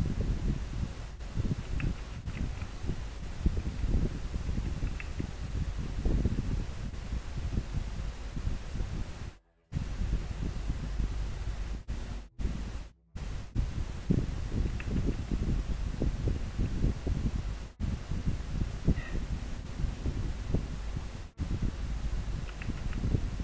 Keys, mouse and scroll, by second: 2.3 scroll down 1, 3.9 scroll up 1.